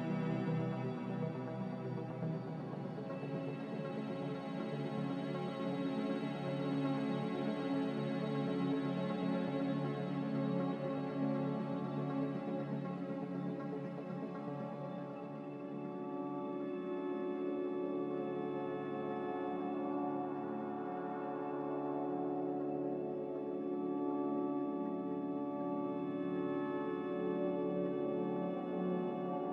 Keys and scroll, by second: 4.0 ctrl+z, 7.3 a.